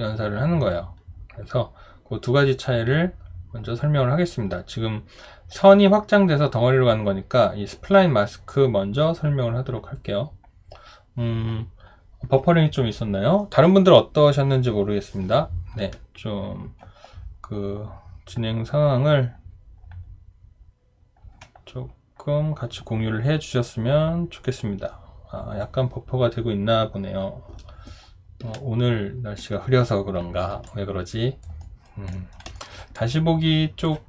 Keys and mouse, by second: 30.7 alt+click, 31.6 alt+right click, 32.1 alt+middle click, 32.6 alt+right click, 32.9 alt+click.